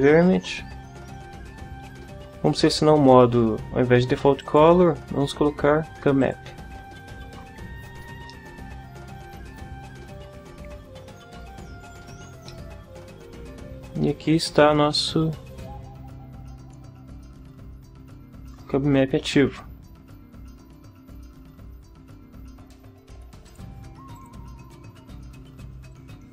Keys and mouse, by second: 4.4 click, 6.2 click, 8.3-12.1 middle drag, 12.5 middle click, 12.6 click, 12.7 middle click, 12.8 click, 13.7-15.2 middle drag, 15.2 click, 15.9 middle click, 16.0-20.2 drag, 20.2 middle click, 21.7 click, 23.5 click, 24.1 click, 25.9 click.